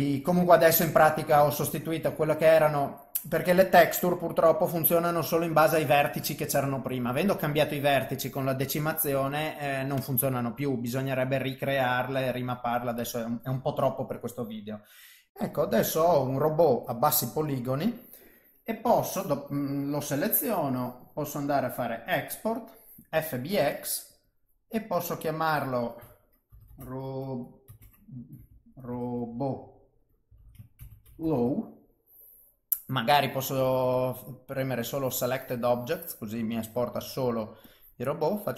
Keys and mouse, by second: 0.8 shift+middle click, 1.8 middle click, 4.3 middle click, 7.2 middle click, 8.5 middle click, 15.3 ctrl+alt+shift+F10, 15.3 middle click, 16.3 middle click, 20.4 click.